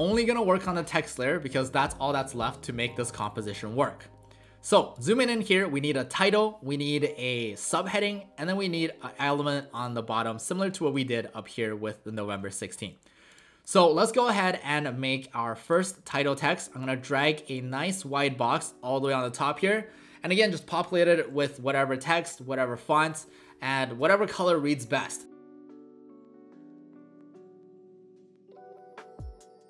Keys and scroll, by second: 4.7 alt+space, 25.1-27.3 typing, 28.4 ctrl+alt+shift+a.